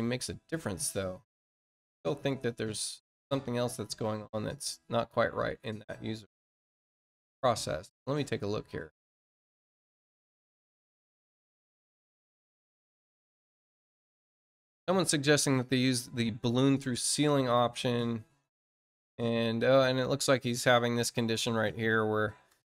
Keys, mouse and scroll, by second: 2.2 ctrl+click, 4.9 click, 9.5-10.8 scroll down 2, 12.0 scroll down 2, 13.8 scroll down 2, 15.8 scroll up 2, 16.5-18.4 scroll down 2, 19.2 scroll down 2, 20.2 scroll down 2, 21.3 scroll up 2.